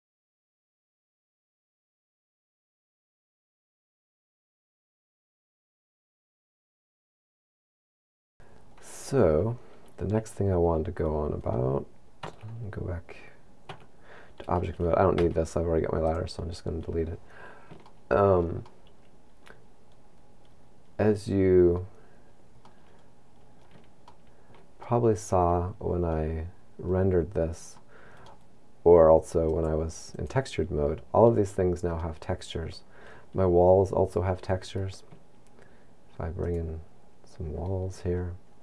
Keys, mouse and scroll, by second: 8.4 middle click, 9.1-9.9 scroll down 10, 11.4-12.2 scroll up 6, 12.2 Tab, 12.4 scroll down 10, 13.7 Tab, 15.2 x, 17.2 scroll down 3, 17.8 shift+middle click, 18.6 middle click, 22.1-22.7 scroll down 4, 22.7 middle click, 24.1 shift+middle click, 24.9 middle click, 26.5-27.8 scroll up 5, 27.8 middle click, 29.5 click, 32.1 middle click, 33.9-34.3 scroll down 2.